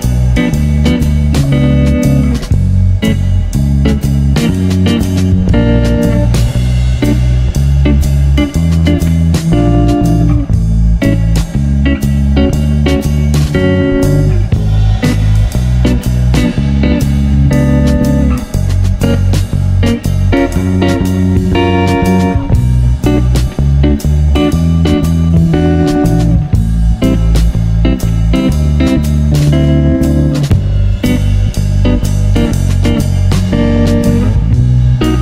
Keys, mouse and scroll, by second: 0.3 s, 3.2 Tab, 3.4-4.1 middle drag, 4.1 scroll down 3, 4.4-4.7 middle drag, 4.7 click, 4.9-5.8 middle drag, 5.8 click, 6.5 s, 7.4 click, 7.7 scroll down 1, 7.7-8.3 middle drag, 8.3 scroll up 1, 8.5 middle drag, 8.8 click, 9.0-9.5 middle drag, 9.5 s, 10.4-11.1 middle drag, 11.1 click, 11.3 scroll up 3, 11.5-12.6 middle drag, 12.6 click, 13.2 g, 14.7-15.3 middle drag, 15.3 s, 16.1 click, 16.3-17.0 middle drag, 17.0 scroll down 3, 17.2 middle click, 17.6 click, 17.9-18.4 middle drag, 18.4 s, 19.4-20.3 middle drag, 20.3 click, 20.9 g, 21.9 click, 22.5 click, 22.8 middle click, 23.0-23.3 scroll down 5, 23.3 middle drag, 23.5 scroll up 2, 23.7-24.1 middle drag, 24.2 scroll up 1, 24.3 middle click, 25.0 click, 25.4 shift+click, 25.6 shift+click, 26.1 s, 26.9 ctrl+z, 27.3-27.7 middle drag, 27.7 shift+click, 29.4 shift+click, 30.2 ctrl+p, 31.0-31.4 middle drag, 31.4 s, 32.5-33.6 middle drag, 33.6 s, 34.5 middle drag, 34.7-35.1 scroll up 4.